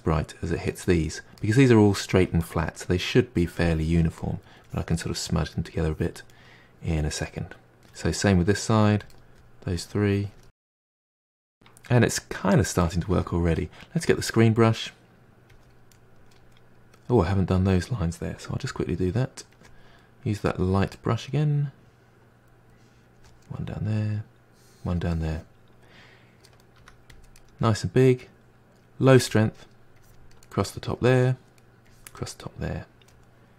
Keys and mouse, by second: 3.4-4.2 drag, 4.2-4.6 middle drag, 4.6-5.1 drag, 5.1-5.8 middle drag, 5.8-6.3 drag, 6.3-8.4 middle drag, 8.4-8.8 drag, 8.8 middle drag, 9.1-9.5 drag, 9.5-9.9 middle drag, 9.9-10.4 drag, 10.4-14.1 middle drag, 14.1-15.9 drag, 15.9-18.6 middle drag, 18.6 f, 20.5 click, 21.0-21.7 middle drag, 21.7-23.4 drag, 23.4-24.5 middle drag, 24.5-25.2 drag, 25.2-26.8 middle drag, 26.8 f, 27.4-30.0 middle drag, 30.0-30.4 drag, 30.4-31.9 middle drag, 31.9-32.3 drag, 32.3-33.5 middle drag.